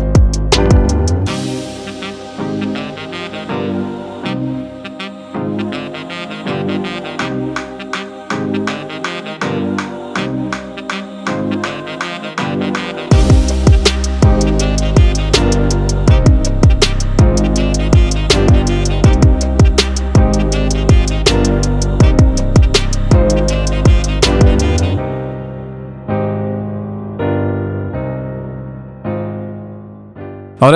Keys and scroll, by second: 0.2 i, 0.3 super+z, 0.8 v, 0.8 super+=, 0.9 super+=, 1.1 super+j, 1.1 p, 1.9 super+z, 3.0 super+0, 3.6 Return, 3.6-5.2 typing, 5.1 super+d, 5.5 Up, 5.6 super+z.